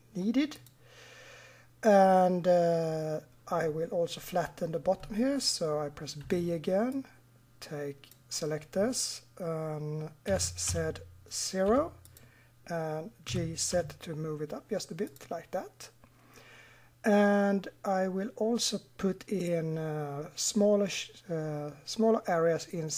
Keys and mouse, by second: 6.2 b, 10.3 s, 13.3 g.